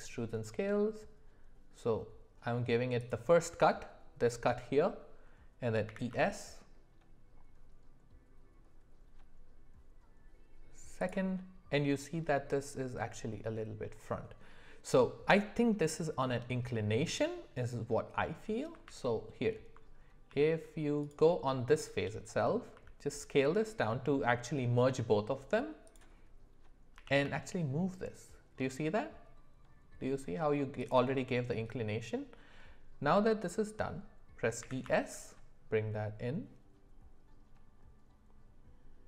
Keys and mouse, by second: 5.9 e, 18.8 ctrl+z, 20.3 g, 22.7 s, 26.9 g, 34.6 e.